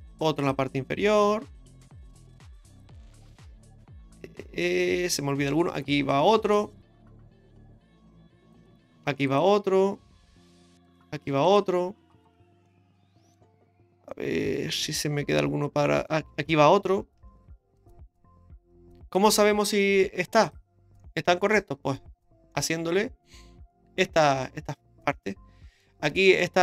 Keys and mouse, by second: 0.1 ctrl+r, 3.0-5.5 middle drag, 6.1 ctrl+r, 9.0 ctrl+r, 11.3 ctrl+r, 12.6 middle click, 14.1-16.1 middle drag, 17.5 ctrl+r, 20.4 click, 21.0 middle click, 22.5-25.8 middle drag, 26.3 shift+middle click.